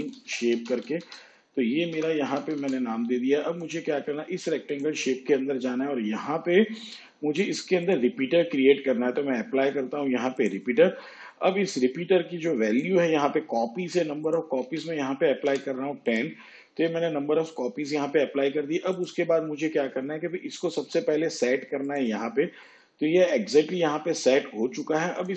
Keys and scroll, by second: 0.0-2.2 typing, 2.5 Return, 14.6 1, 15.4 0.